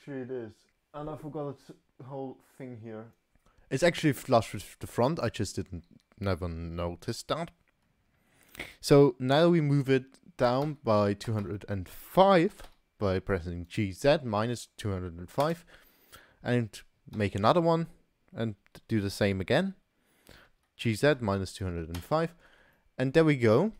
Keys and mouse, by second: 0.7 click, 6.3 shift+d, 17.1 shift+d, 22.7 click, 22.8 middle click.